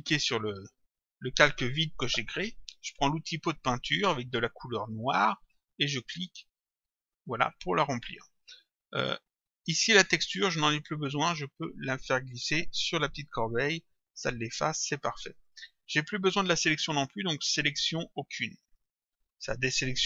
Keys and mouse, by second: 0.5 click, 3.8 click, 6.6 click, 9.3 click, 10.8 click, 15.5 click, 17.4 click, 18.7 click.